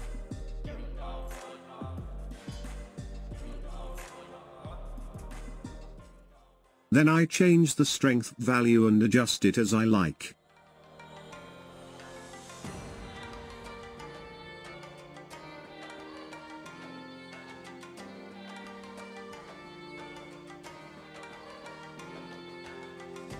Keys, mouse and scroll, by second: 1.4 space, 5.6 space, 7.1-10.1 drag, 11.3 space, 14.0 space, 15.2-18.3 drag, 22.0 space.